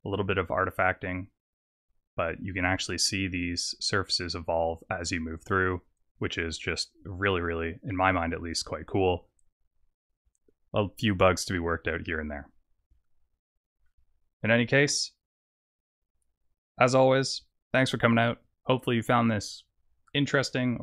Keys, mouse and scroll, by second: 7.9 middle click, 8.6-9.9 scroll up 4, 12.2-12.9 scroll down 5.